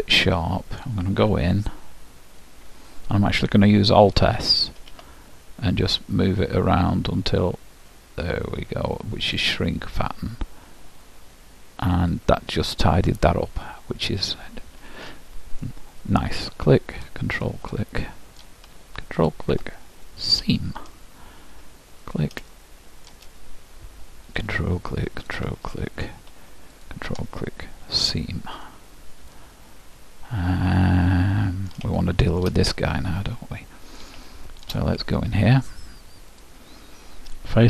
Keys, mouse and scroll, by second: 1.4 KP_Decimal, 1.8 middle click, 4.9 alt+s, 12.7-15.1 middle drag, 16.6-19.2 drag, 17.9-19.8 middle drag, 19.4-21.0 drag, 22.2-24.0 drag, 22.6-24.5 middle drag, 24.5-28.6 drag, 25.8-27.6 middle drag, 28.8-31.4 middle drag, 32.1-34.4 middle drag, 36.6-37.6 drag.